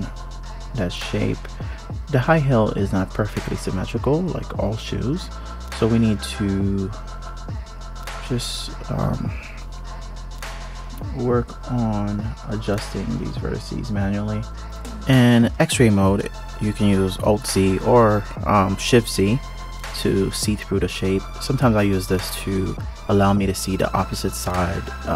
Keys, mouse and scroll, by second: 1.4 alt+z, 2.2 click, 2.7-3.5 scroll up 2, 3.5 click, 3.8-4.3 scroll down 2, 4.3-5.8 scroll up 1, 5.8 click, 6.9 scroll down 2, 7.7 shift+click, 8.4 ctrl+KP_3, 9.0-9.9 scroll up 2, 9.9 KP_Decimal, 10.5-11.5 scroll down 3, 11.5 g, 12.9 click, 13.3 g, 15.0 click, 15.4 g, 17.4 click, 18.4 click, 19.3 KP_3, 20.2 ctrl+KP_3, 21.4 g, 24.1 click.